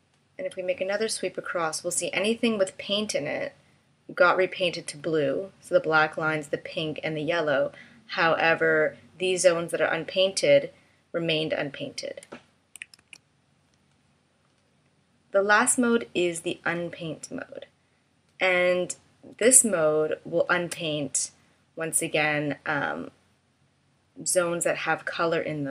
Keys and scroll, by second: 12.9 super+z, 19.4 space.